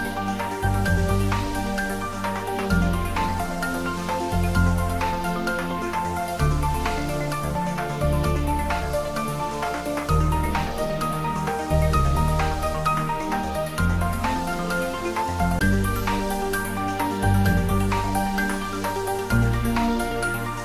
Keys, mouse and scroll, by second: 1.5 click, 2.8 3, 3.6 scroll down 1, 5.2 click, 7.2 shift+click, 12.4 e, 17.7 click, 18.3 scroll down 1, 19.2-20.6 middle drag.